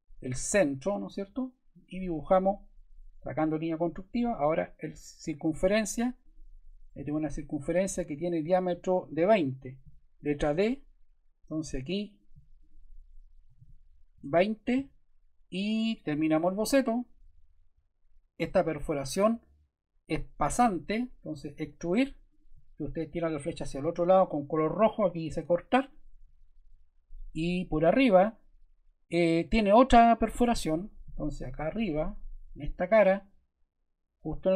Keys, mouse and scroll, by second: 1.7 click, 3.6 click, 5.3 click, 6.2 click, 6.9-7.5 scroll, 7.5 click, 10.4 d, 12.1 click, 12.6 click, 13.2-15.6 typing.